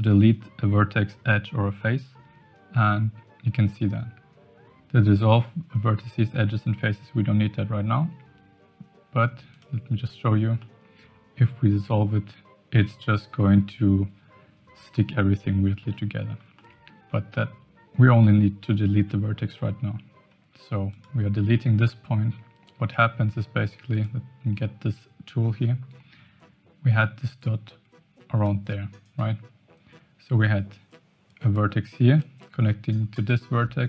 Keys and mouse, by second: 10.5-13.6 middle drag, 15.8 ctrl+z, 16.5 middle click, 17.6 x, 23.0 Tab, 23.9 click, 27.0-28.5 drag, 30.9 click, 32.1-33.2 drag.